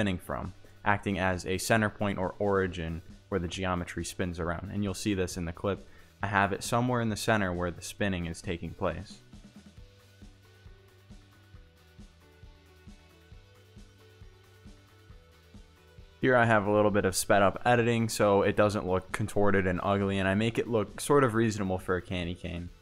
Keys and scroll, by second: 5.7 Tab, 6.2-8.1 typing, 7.3 Return, 9.3 Tab, 12.6 Tab, 13.2 1, 15.3-20.9 typing, 15.8 Return, 16.0 Tab, 17.5 Tab, 19.8 Tab, 20.5 Return, 21.3 Tab, 22.3 Tab, 22.7 1.